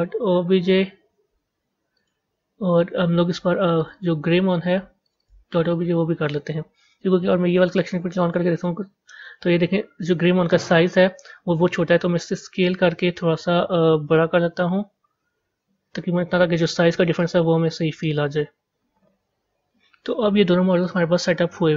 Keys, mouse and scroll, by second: 7.6 click, 8.4-9.3 scroll up 5, 9.3-10.6 middle drag, 10.6-13.7 scroll down 1, 13.7 s, 17.1-18.6 middle drag, 20.7-21.7 middle drag.